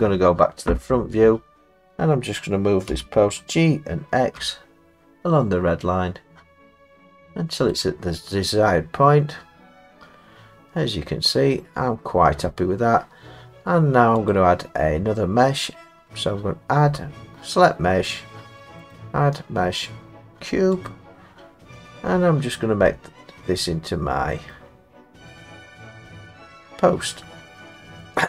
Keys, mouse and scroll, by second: 2.9 g, 4.4 x, 7.7 click, 8.6 middle click, 12.4 middle click, 12.6 middle click, 14.3 click, 18.9 click, 20.9 click, 21.5 middle click, 22.6 middle click, 24.5 middle click, 28.0 middle click.